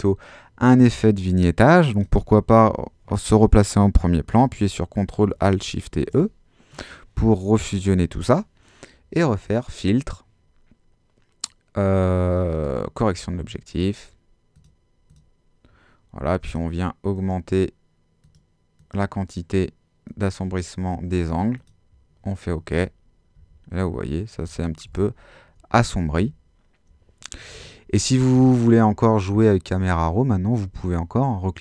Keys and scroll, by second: 5.9 alt+shift+super+e, 23.4 super+z.